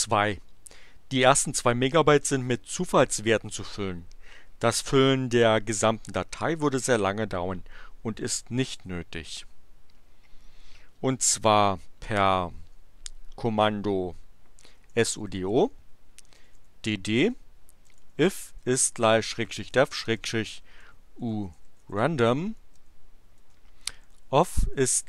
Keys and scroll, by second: 14.5-24.5 typing.